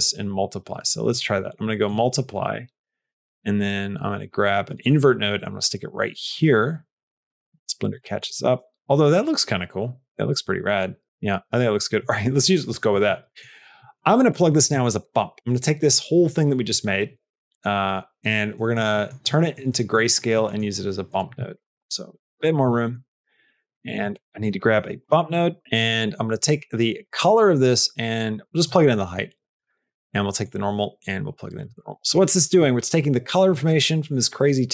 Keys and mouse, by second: 0.1 click, 1.5 middle click, 2.2 click, 7.3 shift+a, 8.1 shift+a, 10.1 click, 11.9 middle click, 13.2 middle click, 13.7 middle click, 18.5 middle click, 19.2 middle click, 19.6 middle click, 20.2 middle click, 21.0 click, 21.4 shift+click, 21.6 g, 22.3 click, 22.6 middle click, 23.0 middle click, 23.4 middle click, 23.7 click, 24.0 shift+a, 27.0-28.5 drag, 28.7 middle click, 29.5 click, 30.3-31.5 drag.